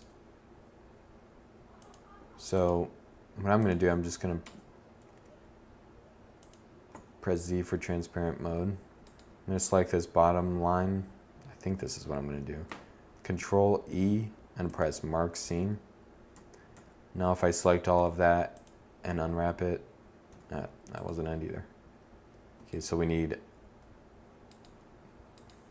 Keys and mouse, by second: 3.3 Tab, 3.9 Tab, 5.8 z, 11.4 ctrl+e, 15.2 a, 15.6 a, 16.8 u, 19.2 a.